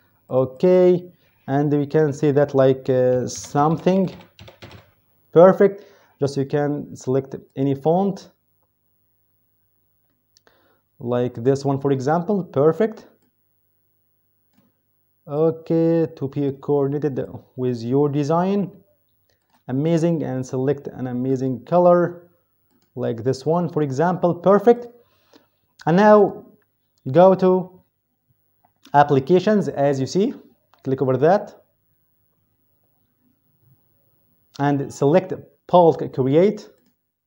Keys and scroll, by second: 2.7-5.0 typing.